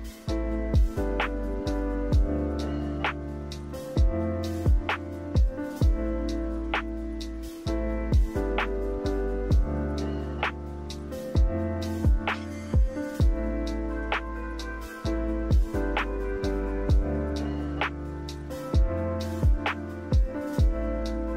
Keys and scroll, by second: 9.2 8, 9.4 Return, 16.5 Delete.